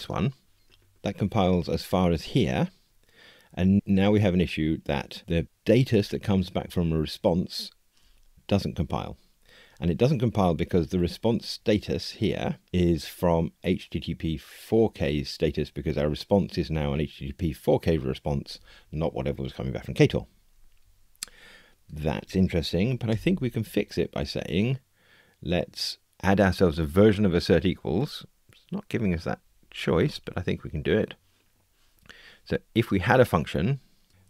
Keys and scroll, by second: 23.1 alt+Return.